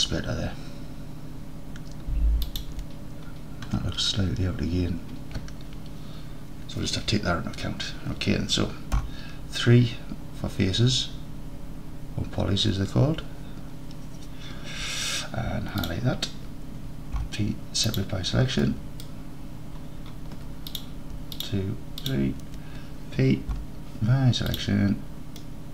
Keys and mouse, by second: 2.5 shift+click, 9.0 3, 15.9-17.2 drag, 17.2 p, 18.7 click, 20.8 click, 23.6 p, 25.4 click.